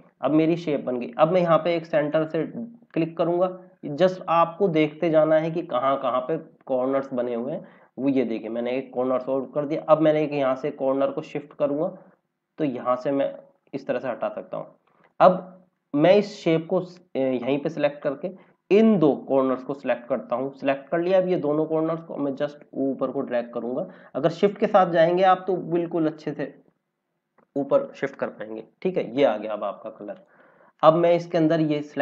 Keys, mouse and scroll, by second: 1.8 click, 10.9 click, 30.1 click.